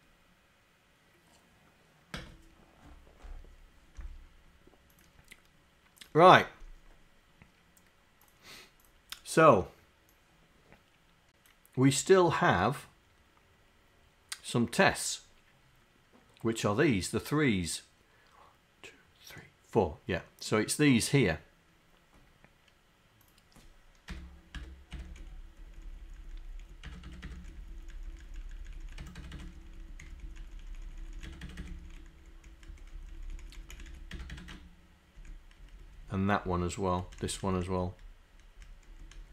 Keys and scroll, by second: 24.6 Tab, 25.0 Tab, 25.1 Down, 25.4 Left, 26.0 Left, 26.2 Left, 26.9 Tab, 27.1 Tab, 27.6 Left, 28.4 Left, 28.7 Left, 28.9 Tab, 29.4 Tab, 29.5 Down, 29.9 Left, 30.0 Down, 30.6 Left, 31.0 Left, 31.3 Tab, 31.7 Tab, 31.9 Down, 32.2 Down, 32.5 Left, 32.8 Up, 33.1 Left, 33.7 Left, 34.2 Tab, 35.7 Right, 36.5 Left, 37.1 Up, 37.2 Down, 37.6 Up, 37.7 Down, 38.6 Up, 38.9 Down, 39.2 Up.